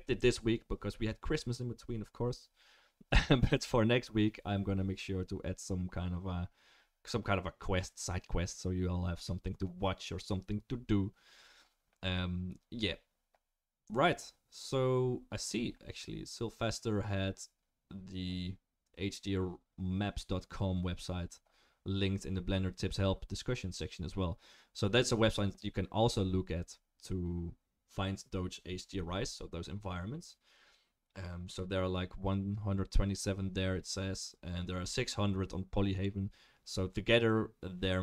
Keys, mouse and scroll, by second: 22.3-38.0 drag, 22.3-38.0 middle drag, 22.3-38.0 right drag.